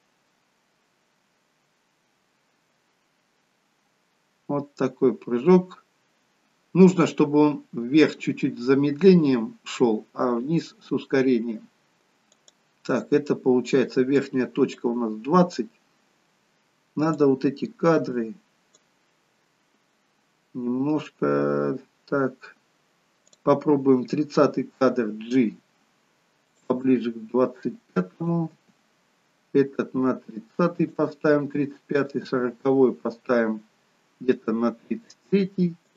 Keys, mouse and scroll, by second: 12.5 click, 14.2 click, 23.3 click, 24.8 g, 28.3 click, 28.6 g, 32.0 click, 32.3 g.